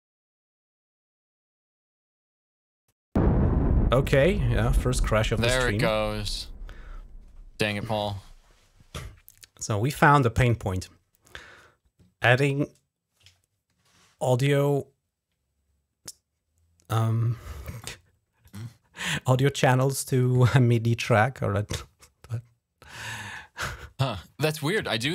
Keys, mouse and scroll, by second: 6.1 click, 17.6-18.8 drag, 21.6-23.0 drag.